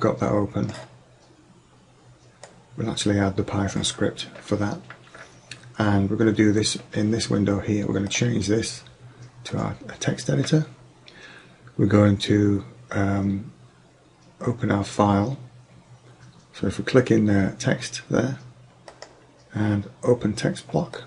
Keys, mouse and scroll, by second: 8.2-10.0 drag, 16.3 click, 19.0-20.8 drag.